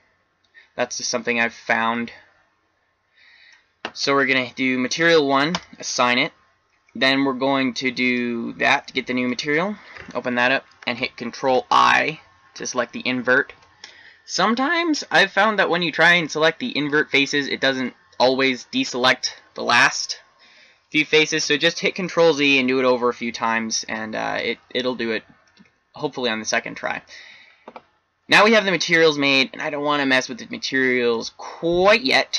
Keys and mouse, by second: 5.5-7.2 drag, 8.0-11.1 drag, 11.4 ctrl+i, 25.4-28.2 middle drag, 31.1-32.2 middle drag.